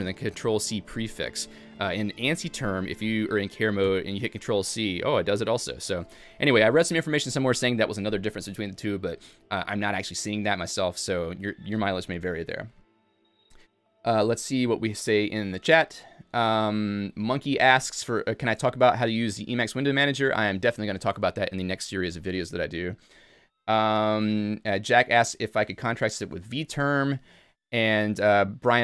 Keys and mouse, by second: 2.1 a, 6.2 Escape.